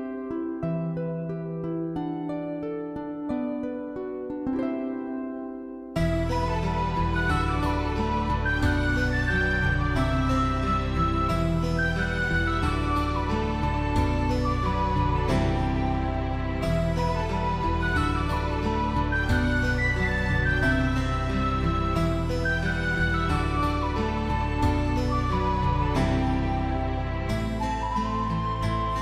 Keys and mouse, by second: 0.2 alt+middle click, 0.5 alt+middle click, 0.8 shift+middle click, 1.1 Tab, 1.2 middle click, 2.3 middle click, 2.9 Tab, 3.0 middle click, 3.1 alt+middle click, 3.3 middle click, 3.9 middle click, 4.4 click, 5.0 shift+middle click, 6.1-8.0 right drag, 8.7 click, 9.6 click, 9.8 shift+middle click, 10.2 shift+middle click, 10.8 shift+middle click, 11.1 alt+middle click, 11.5 shift+middle click, 12.0 alt+middle click, 12.2 click, 13.2 click, 13.4 shift+middle click, 13.8 Tab, 14.0 shift+middle click, 14.3 1, 14.5 alt+z, 15.0 alt+click, 15.5 s, 18.1 click, 19.7 shift+middle click, 20.3 g, 20.6 right click, 21.4 click, 21.9 shift+click, 22.2 g, 23.3 click, 23.6 click, 24.5 click, 24.5 g, 24.7 click, 25.0 g, 25.5 click, 25.8 s, 26.9 click, 27.5 Tab, 27.8 alt+z, 27.8 middle click, 28.6 alt+middle click.